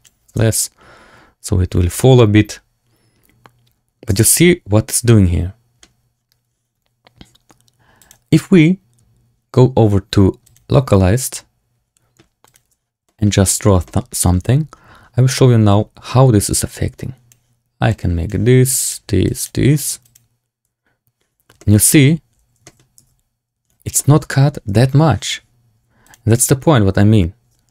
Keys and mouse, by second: 0.2 space, 4.1-5.7 middle drag, 4.1 space, 7.9-10.5 drag, 12.6 click, 13.0 shift+click, 13.4 middle click, 13.8 shift+middle click, 16.6 click, 17.8 click, 18.6 click, 19.2 click, 21.5 shift+drag, 22.5 shift+drag, 22.9 Tab, 23.9 shift+click, 24.7 Tab, 26.0-26.4 drag.